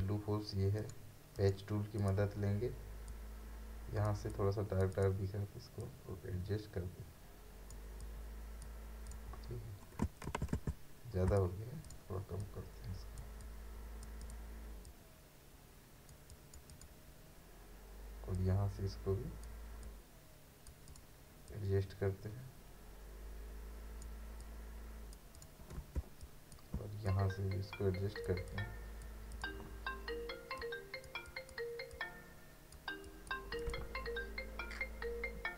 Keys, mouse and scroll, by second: 0.8 right click, 2.0-9.1 drag, 10.3 ctrl+alt+z, 11.3-25.3 ctrl+alt+drag, 26.0 space, 26.2 click, 26.6 space, 27.1-33.0 drag.